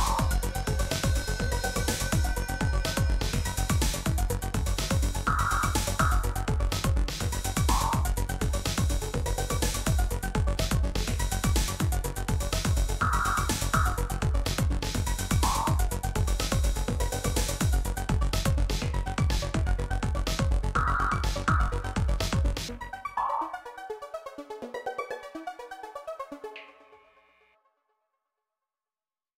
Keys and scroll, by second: 1.7 shift+a, 9.4 s, 9.9 shift+z, 11.4 Tab, 11.9 g, 15.1 Tab, 16.2 3, 17.8 e, 21.1 i.